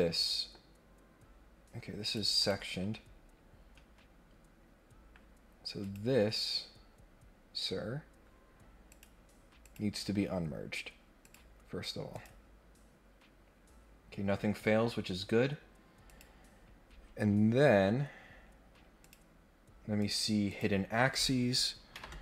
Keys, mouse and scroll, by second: 0.6 scroll down 1, 2.0 click, 3.2 scroll down 1, 5.8 click, 8.9 click, 9.6 click, 11.2 click, 12.1 click, 13.5 scroll down 1, 14.6 scroll down 2, 14.9 scroll up 2, 16.1 click, 19.0 click, 20.0 click, 20.4 click, 21.1 click.